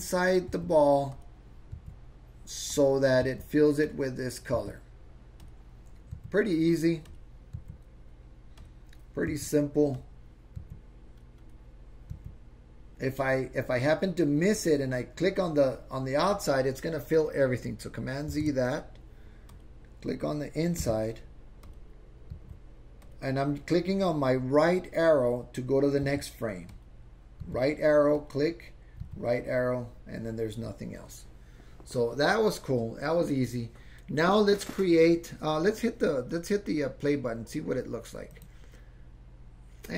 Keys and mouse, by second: 0.0 click, 1.1 Right, 1.1 click, 1.9 Right, 2.7 click, 3.3 Right, 3.3 Right, 3.9 click, 4.6 Right, 4.7 Right, 5.4 click, 6.2 Right, 7.1 click, 7.6 Right, 8.6 click, 9.4 Right, 9.9 click, 10.7 Right, 11.4 click, 12.2 Right, 14.5 click, 18.4 super+z, 19.5 click, 20.9 Right, 21.6 click, 22.4 Right, 23.0 click, 26.1 Right, 26.7 click, 27.5 Right, 28.2 click, 29.1 Right, 38.3 click.